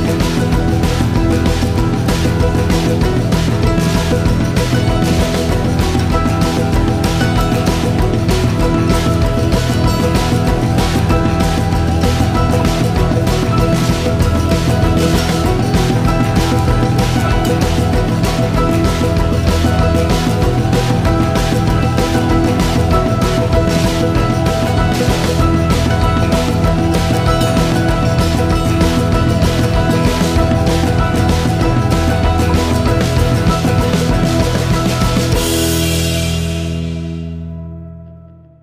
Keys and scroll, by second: 38.1 ctrl+v.